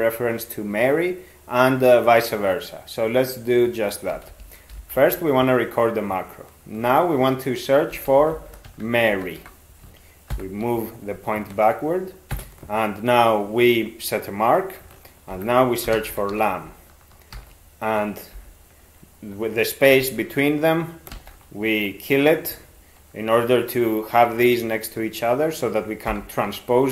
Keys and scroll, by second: 4.2 ctrl+x, 4.8 (, 7.9 ctrl+s, 8.1-9.9 typing, 10.3 alt+b, 12.4 ctrl+space, 15.3 ctrl+r, 15.7-16.8 typing, 17.4 alt+f, 18.4 ctrl+f, 21.2 ctrl+w, 26.1 alt+t.